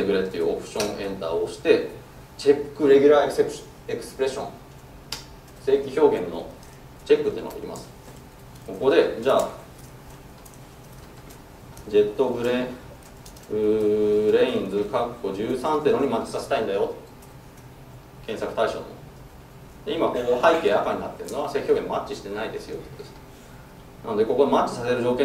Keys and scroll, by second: 0.9 alt+Return.